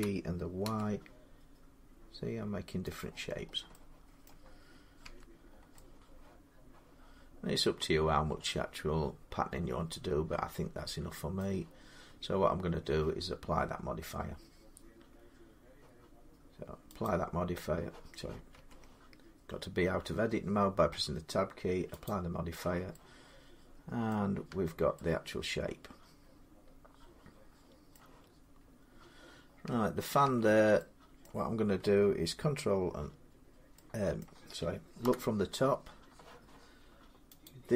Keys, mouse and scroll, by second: 0.0-0.5 typing, 2.1 g, 2.8 click, 3.2 y, 3.2 scroll up 3, 4.1 middle click, 4.8 Tab, 5.3 scroll up 2, 5.7 middle click, 10.1 scroll, 11.2 middle click, 11.9 Tab, 16.9 click, 18.3 Tab, 21.9 click, 23.9 middle click, 24.3 Tab, 27.7 middle click, 28.4-28.9 scroll, 29.5 Tab, 30.0 Tab, 31.0 middle click, 31.1 middle click, 34.0 middle click, 34.8 7, 37.3 click.